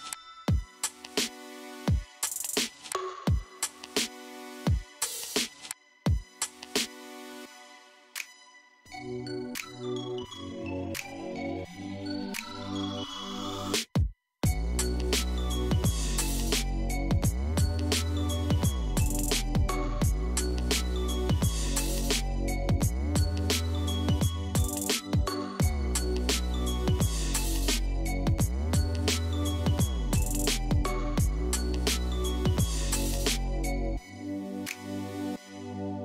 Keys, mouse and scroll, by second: 3.5-6.6 drag, 9.0-11.1 middle drag, 11.1 click, 17.0-20.0 drag, 21.9 KP_1, 24.7-27.7 drag, 30.4 click.